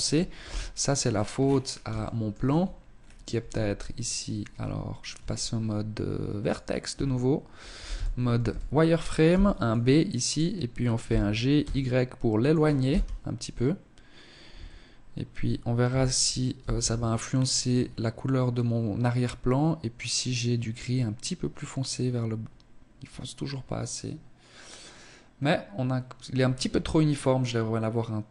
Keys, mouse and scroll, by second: 0.0-0.7 scroll down 10, 0.9 shift+middle click, 1.4 Tab, 1.9-2.3 scroll down 2, 2.3 a, 3.5 Tab, 4.1 Tab, 5.3 click, 5.8 a, 6.8 z, 7.3 a, 8.2 b, 9.9 g, 11.8 KP_0, 13.5 Tab, 14.7 z, 25.6 Escape.